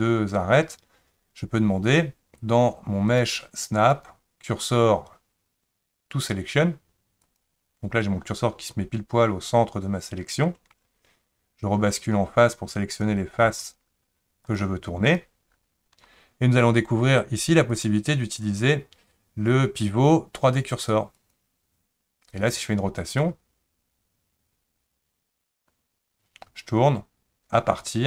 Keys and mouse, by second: 3.1-7.4 drag, 12.1-13.4 drag, 14.5 shift+click, 15.1 shift+click, 17.8-21.3 drag, 23.2-28.0 drag.